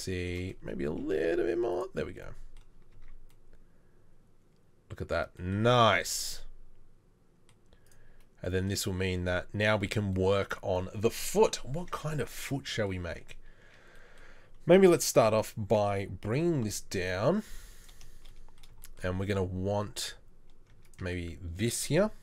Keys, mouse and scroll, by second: 0.9 s, 2.9 Tab, 13.1 Tab, 15.2 3, 16.3 g, 20.7 Tab, 21.0 Tab.